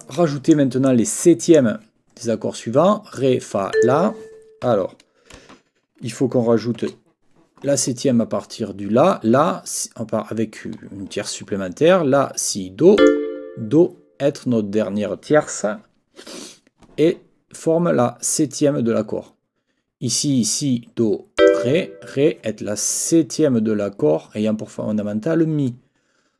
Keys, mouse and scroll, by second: 0.0 click, 0.8 click, 3.7 click, 4.6 n, 13.0 click, 21.4 click.